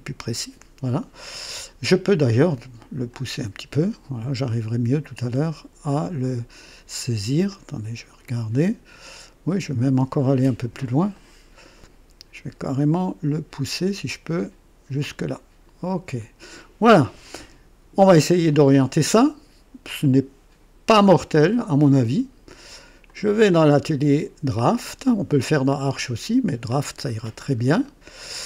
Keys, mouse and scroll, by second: 3.1-6.9 drag, 7.5-9.0 drag, 9.8-10.6 scroll up 1, 10.6 click, 11.1 right click, 13.7-15.2 drag, 15.9 click, 23.1 click, 25.9 click, 27.1-27.5 scroll up 1, 27.8-28.4 right drag.